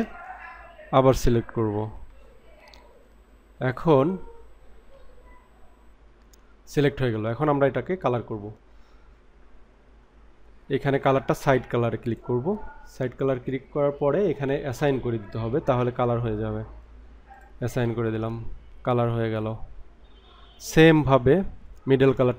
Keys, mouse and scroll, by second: 0.9 ctrl+click, 12.1 click, 17.3 click, 19.3 middle click.